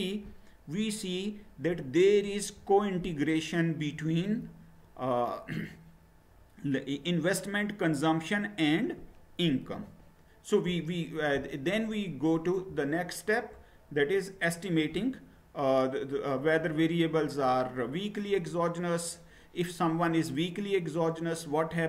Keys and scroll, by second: 9.7 Return.